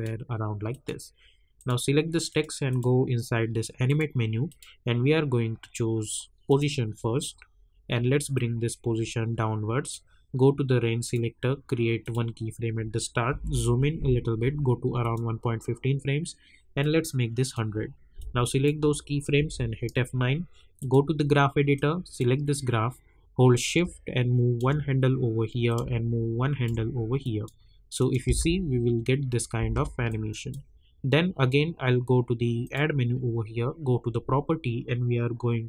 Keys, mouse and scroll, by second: 13.3 =, 15.0-19.4 drag, 19.4 F9, 20.8-25.6 drag, 25.6-28.1 drag, 28.2 space, 30.0-32.6 drag.